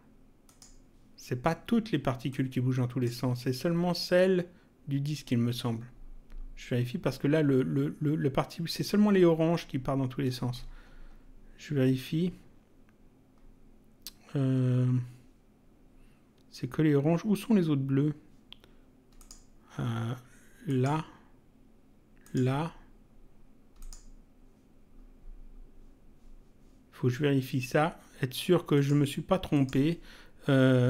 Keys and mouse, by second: 0.5 click, 2.3 click, 19.2 click, 20.6 click, 22.2 click, 23.8 click, 28.7 click.